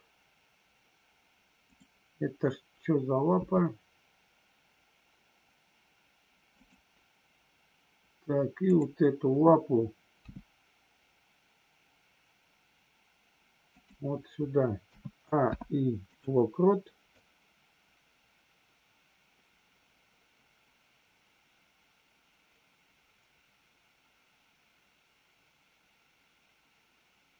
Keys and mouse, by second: 6.5 click, 8.6-9.2 drag, 13.6 click, 15.4 i, 17.2-27.3 drag.